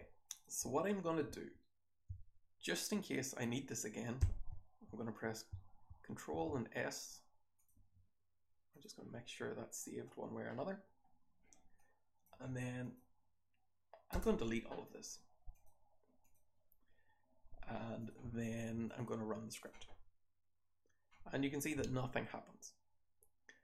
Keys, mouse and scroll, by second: 0.2 click, 5.0 ctrl+s, 5.1 click, 7.5 click, 9.8-10.5 scroll down 1, 10.5-11.0 scroll up 1, 11.0-11.7 scroll down 1, 11.7-12.2 drag, 11.7-12.7 scroll down 1, 12.7 click, 12.7-14.1 scroll down 1, 14.1 BackSpace, 16.2 click.